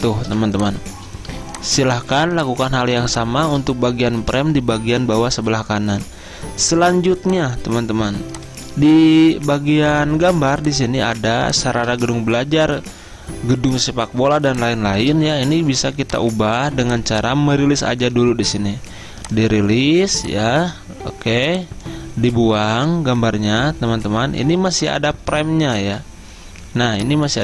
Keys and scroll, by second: 0.3 v, 1.4 space, 2.2 z, 3.1 z, 10.4 z, 15.6 v, 22.8 Delete, 24.5 z, 25.9 v.